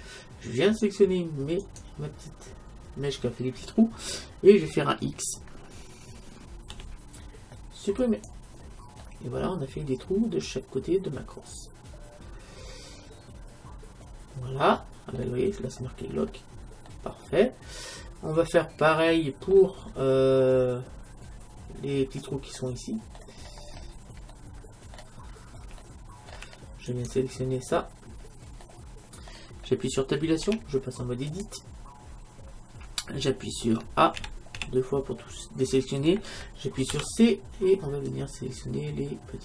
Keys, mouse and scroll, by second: 0.6-3.6 right drag, 6.7 x, 9.1-11.1 middle drag, 15.7-18.8 middle drag, 15.7-16.9 scroll up 1, 19.9 middle click, 21.8-26.9 middle drag, 26.9 click, 27.6-28.9 right drag, 28.7-30.4 middle drag, 30.4 Tab, 34.2 a, 34.6 a, 37.0 c.